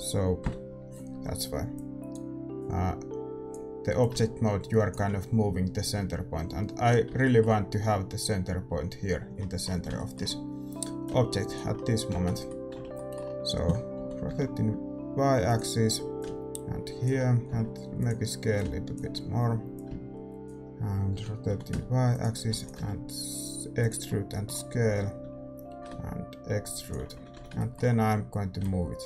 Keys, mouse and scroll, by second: 0.4 KP_7, 1.7-6.5 drag, 9.3-12.1 middle drag, 11.0-13.2 drag, 12.1 z, 12.6 middle click, 12.7 z, 14.0 r, 16.1-17.9 drag, 17.5 s, 18.5-22.1 drag, 21.1 r, 22.4 e, 22.7 s, 24.0-26.2 middle drag, 24.8 a, 25.2 a, 25.7 e, 27.1 a, 27.3 a, 27.5-29.0 middle drag, 28.5-29.0 drag.